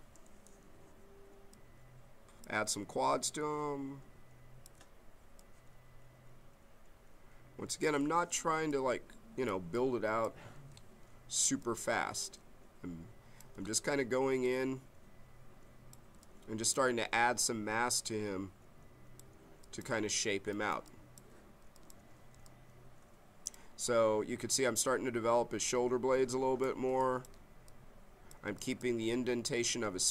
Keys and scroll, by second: 3.1 m.